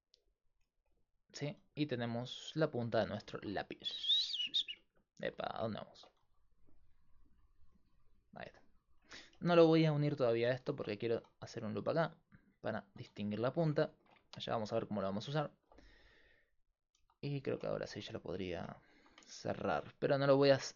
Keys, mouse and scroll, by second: 1.7 s, 6.2 s, 10.7 ctrl+r, 12.9 s, 13.5-15.5 drag, 15.5 ctrl+r, 17.0 a, 17.4-20.2 drag, 20.5 middle click.